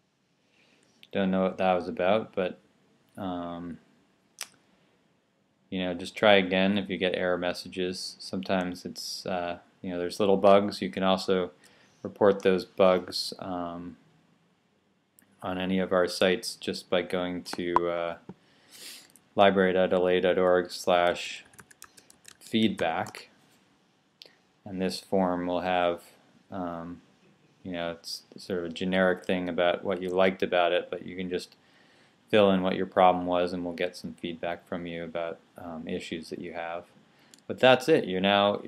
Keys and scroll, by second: 20.4-23.0 typing.